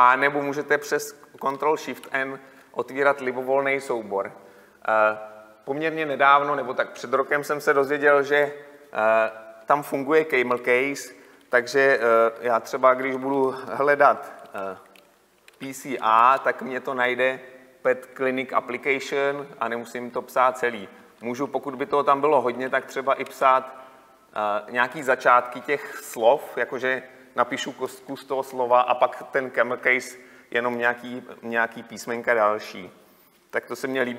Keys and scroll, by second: 2.1 ctrl+n.